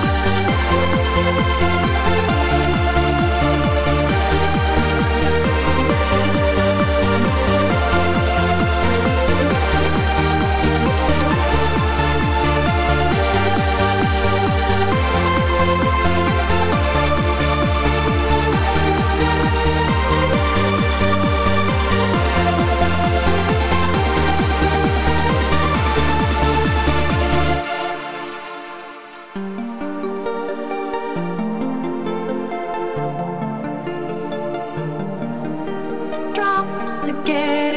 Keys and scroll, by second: 3.9 alt+shift+super+e.